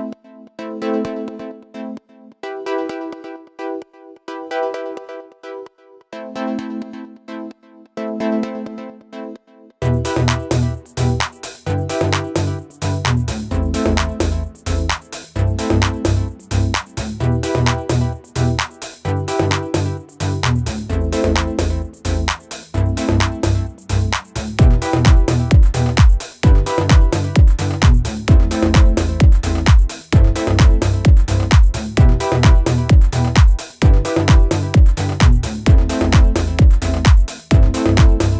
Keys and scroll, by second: 9.5 ctrl+z, 11.2 ctrl+z, 18.1 ctrl+z, 23.6 Escape, 26.2 Escape, 34.1 ctrl+z.